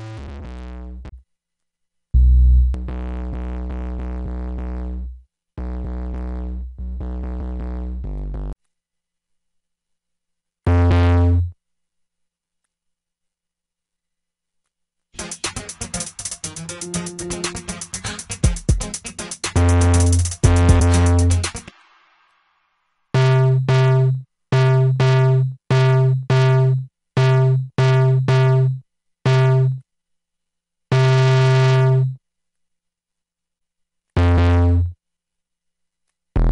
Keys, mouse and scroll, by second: 8.7 F5, 8.9 F6, 10.4 Up, 32.6 F1, 34.7 F6, 34.9 alt+F8, 35.0 F9.